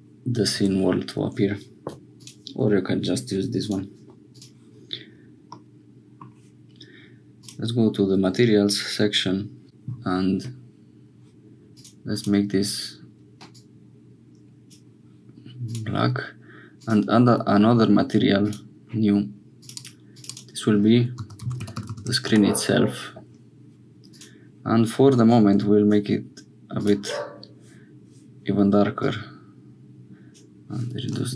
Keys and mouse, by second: 0.6 Tab, 3.6 middle click, 5.5 middle click, 11.7 click, 12.1 click, 16.7 click, 18.4 click, 19.6 click, 20.1 click, 20.2-22.9 drag, 21.8 e, 24.1 click, 29.0-30.4 drag.